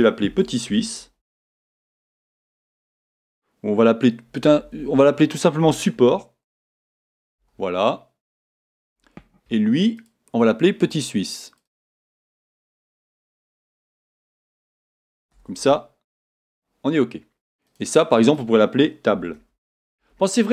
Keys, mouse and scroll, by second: 4.4 BackSpace, 6.9 p, 8.4 Return, 11.5-17.7 drag, 15.5 s, 16.4 Return, 17.9-20.5 drag.